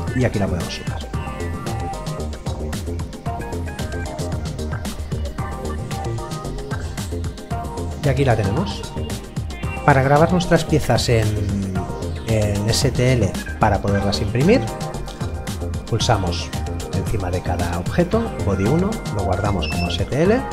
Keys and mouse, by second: 3.9 click, 5.5 middle click, 16.8 right click, 19.0 click.